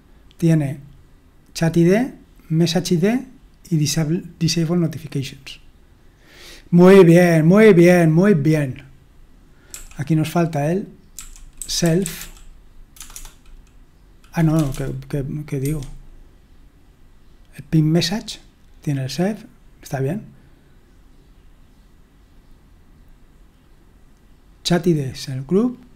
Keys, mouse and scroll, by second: 10.9-13.1 typing, 14.5 typing, 15.6 Escape.